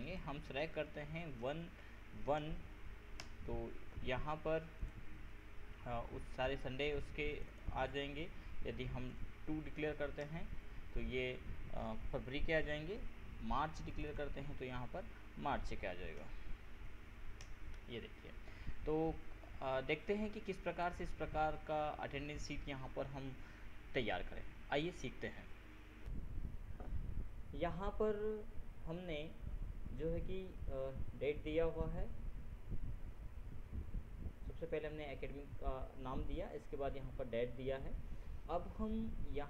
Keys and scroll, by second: 1.6 ctrl+BackSpace, 2.6 ctrl+1, 3.4 ctrl+Return, 9.3 ctrl+BackSpace, 9.9 ctrl+2, 10.4 ctrl+Return, 15.5 ctrl+Left, 16.4 ctrl+BackSpace, 17.0 ctrl+3, 17.6 ctrl+Return, 20.3 ctrl+Return, 26.2 ctrl+F7.